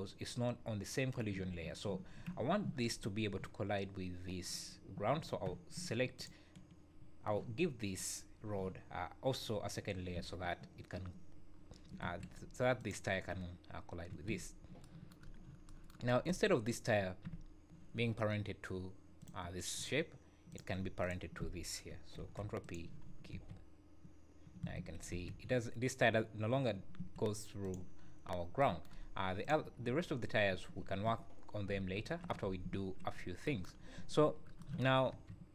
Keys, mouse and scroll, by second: 6.1 shift+click, 10.1 space, 12.0 Escape, 12.8 click, 14.2 Escape, 14.7 scroll up 1, 15.2-15.6 scroll up 4, 16.2 click, 19.2 click, 21.0 shift+click, 21.1 shift+click, 22.1 ctrl+p, 23.0-23.4 scroll down 6, 23.3 space, 24.7 Escape, 25.1 space, 26.9 Escape, 27.6 click, 28.2 scroll up 2, 29.4 click, 29.8 `, 30.5 `, 33.1 scroll up 4, 33.7 scroll down 5, 33.9 `, 34.2 scroll up 3, 35.0-35.3 scroll down 2, 35.1 space.